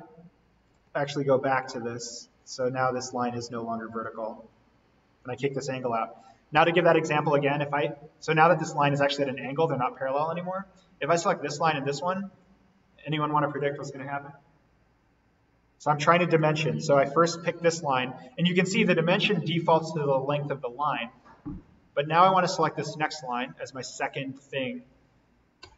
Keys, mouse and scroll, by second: 0.1-0.7 scroll down 1, 0.7 z, 2.4 click, 2.8 Delete, 4.0-5.8 drag, 6.5 d, 11.0 click, 16.3 Escape, 17.8 click.